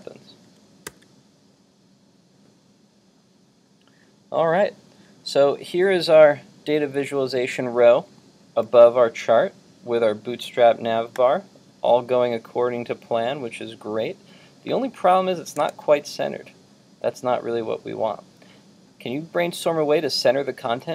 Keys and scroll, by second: 0.9 super+r, 15.6 super+Tab, 18.6 super+Tab.